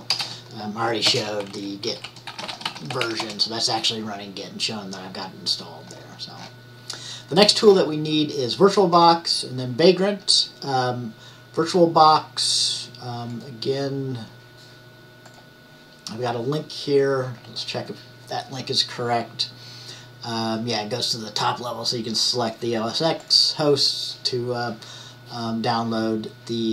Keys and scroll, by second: 0.0-3.6 typing.